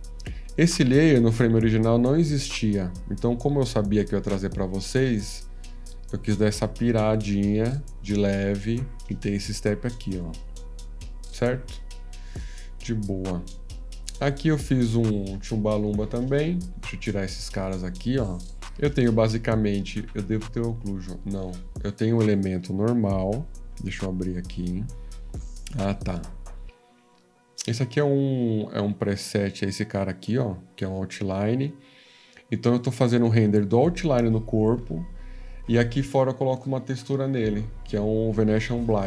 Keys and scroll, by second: 24.5 F13, 37.8 F14.